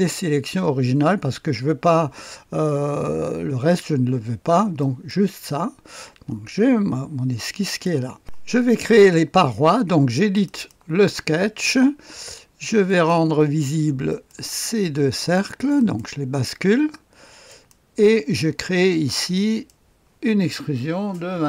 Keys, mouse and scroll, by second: 4.8 click, 8.2 click, 10.3 click, 12.8 click, 14.1 click, 15.7 click, 17.4 click, 19.3 click, 21.1 KP_2, 21.3 KP_5.